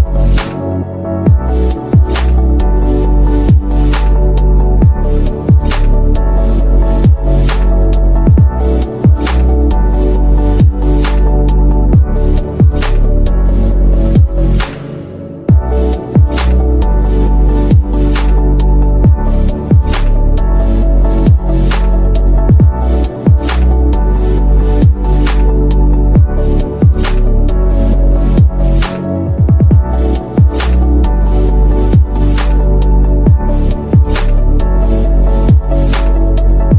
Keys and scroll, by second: 4.5-5.4 typing, 5.6 Escape, 23.0 shift+Page_Down, 23.6 ctrl+Page_Up, 27.7 shift+F2, 28.2 Escape, 33.0 shift+F2, 33.7 Escape.